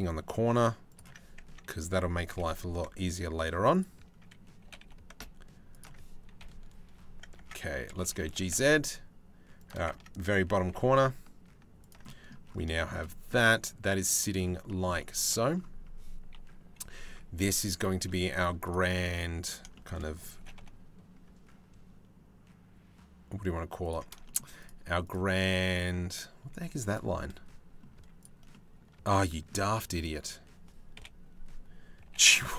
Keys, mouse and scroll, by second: 1.0 Tab, 1.9 g, 4.2 g, 6.0 KP_3, 6.9 Tab, 7.3 a, 7.6 g, 9.5 Tab, 10.2 g, 11.6 middle click, 12.3 shift+middle click, 12.9-13.9 middle drag, 14.2 shift+middle click, 14.6 middle click, 15.9 KP_3, 16.6 Tab, 17.6 z, 18.7 click, 19.3 shift+middle click, 19.5 click, 19.9 g, 23.8 shift+middle click, 24.2-26.3 middle drag, 26.3 2, 26.5 middle click, 27.5 z, 28.1 middle click, 29.0 click, 30.5 KP_7, 31.6 g.